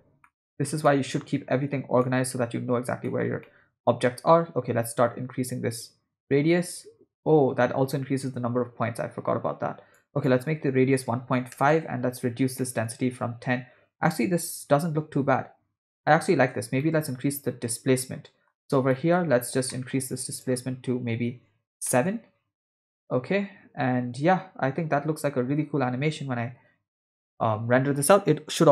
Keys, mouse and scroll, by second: 0.2 ctrl+middle click, 0.9 middle click, 2.0 middle click, 3.0 middle click, 3.4 ctrl+middle click, 4.9-10.0 drag, 10.1-11.7 drag, 12.6 middle click, 14.0 space, 14.7 space, 15.2 space, 16.5 space, 16.9-18.5 middle drag, 18.9 middle click, 19.7 middle click, 20.3-22.1 drag, 22.9 space, 25.6-27.2 typing.